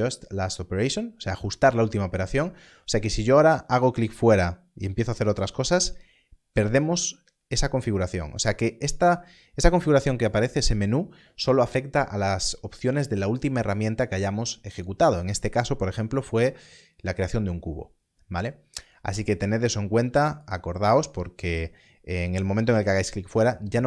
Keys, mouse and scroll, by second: 3.7 click, 7.6 click, 8.9 click, 20.4 click.